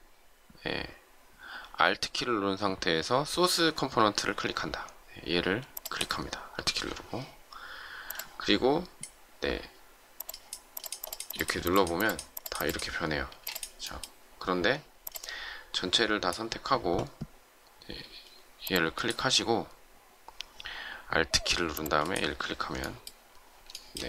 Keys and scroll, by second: 13.2 space.